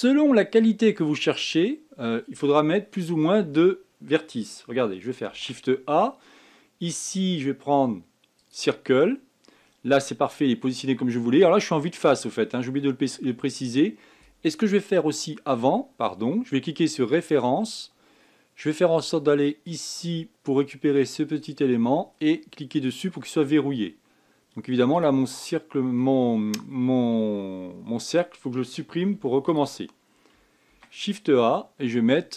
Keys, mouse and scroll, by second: 5.7 shift+a, 11.8-12.8 scroll down 4, 12.8-15.8 scroll up 1, 15.9 click, 20.0-23.1 drag, 23.3 click, 23.9 scroll down 3, 24.3 scroll up 2, 25.3 click, 29.6 x, 31.1 shift+a.